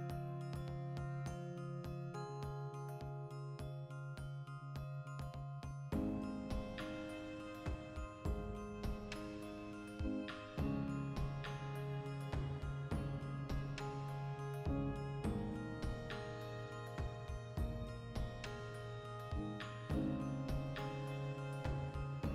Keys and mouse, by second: 4.4 Tab, 4.9 a, 5.3 Tab, 5.5 n, 6.6 n, 7.0-10.6 drag, 10.6 ctrl+2, 10.9-13.1 middle drag, 11.3 Tab, 13.1 click, 13.8 ctrl+r, 14.7 click, 15.0 alt+q, 15.3-18.8 shift+middle drag, 18.6 1, 18.8 right click, 19.8 b, 20.5 g, 21.1 click, 21.2 right click, 21.6 g, 22.1 click.